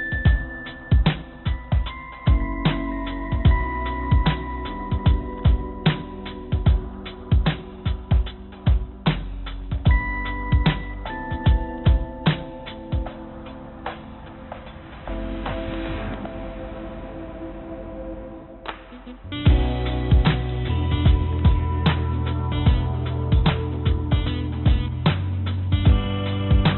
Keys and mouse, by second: 3.0-5.2 drag, 5.3-9.1 drag, 13.2 shift+a, 16.6 r, 20.2 click, 21.3 ctrl+z, 22.2 r, 24.4 click, 25.8 click, 26.1 click, 26.6 click.